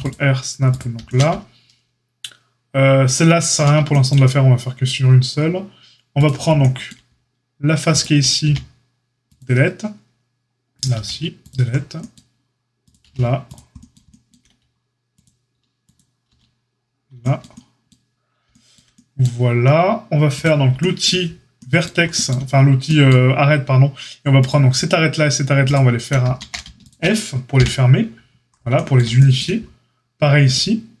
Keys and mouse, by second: 6.2-7.9 shift+drag, 8.4 x, 10.7 click, 10.8-15.9 middle drag, 10.9 x, 13.0 x, 15.9 click, 16.0-20.3 middle drag, 16.2 x, 20.3-24.4 drag, 24.4-25.6 shift+middle drag, 25.6 shift+click, 25.7-26.7 shift+middle drag, 26.3 ctrl+z, 26.7 shift+click, 26.8-31.0 shift+middle drag, 27.5 f.